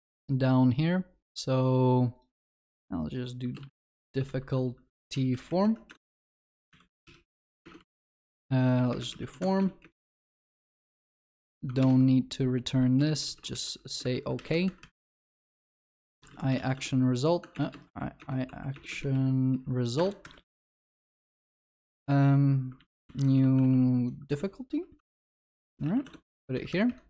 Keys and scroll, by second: 0.5 ctrl+F8, 5.9 Return, 7.6 Return, 8.2 ctrl+BackSpace, 11.8 ctrl+BackSpace, 14.0 Escape, 15.7 ctrl+w, 16.7 Return, 18.0 ctrl+BackSpace, 22.8 ctrl+w.